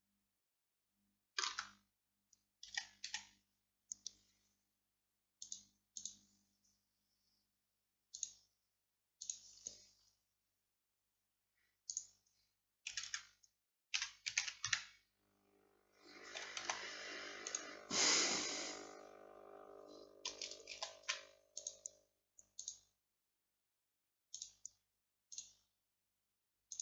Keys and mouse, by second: 1.6 Tab, 1.6-5.5 middle drag, 2.7 a, 3.1 a, 7.1-14.0 middle drag, 13.0 a, 13.1 a, 14.0 r, 16.6 g, 20.8 ctrl+s, 22.7-24.5 drag.